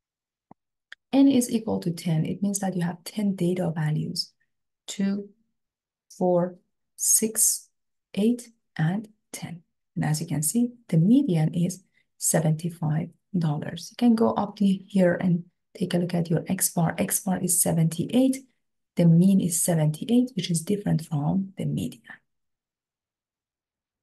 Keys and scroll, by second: 13.6 Up, 14.5 Up, 15.2 Up.